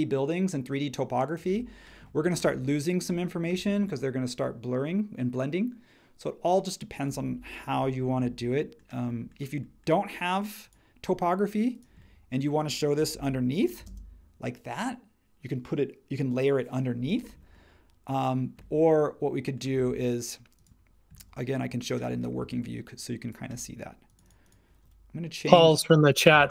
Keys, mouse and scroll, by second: 13.1 super+1, 13.8 space, 26.4-26.5 typing.